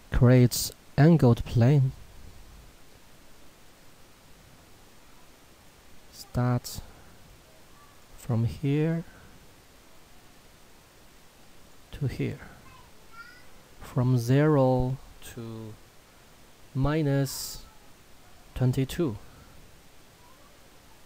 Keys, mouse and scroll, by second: 1.6 click, 5.5 click, 11.6 click.